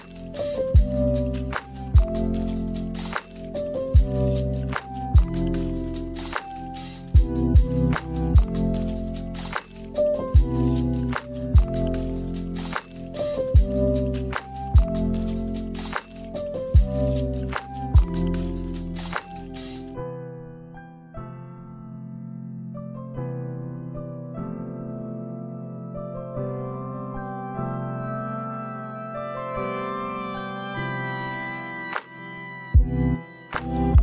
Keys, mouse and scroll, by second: 0.9 click, 6.7 click, 11.2 click, 11.6 click, 11.8 click, 11.9 click, 12.7 click, 14.2 click, 15.0 middle click, 16.3-16.6 scroll down 2, 16.6 space, 17.9 middle click, 22.9 space, 23.2 middle click, 23.7 scroll up 2, 24.2 middle click, 25.0-25.9 scroll up 1, 26.3 middle click, 28.7 middle click, 30.9 click, 32.4 click.